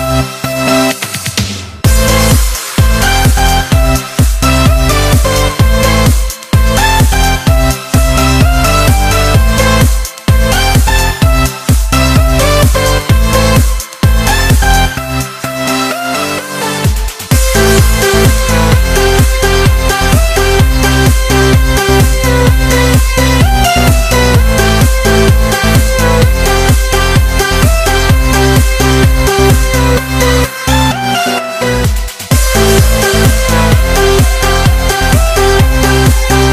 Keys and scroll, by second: 11.3 x, 17.9 super+t, 30.3 Return.